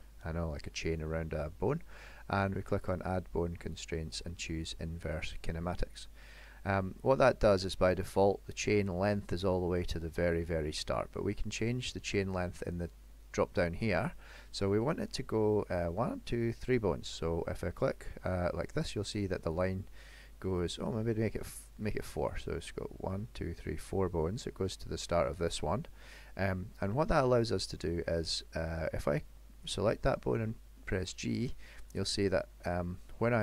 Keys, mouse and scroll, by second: 2.8 click, 7.7 middle click, 18.0 click, 18.8 click, 19.6 click, 20.7 click, 27.1 middle click, 28.3 middle click, 29.7 click, 30.3 g, 32.4 middle click.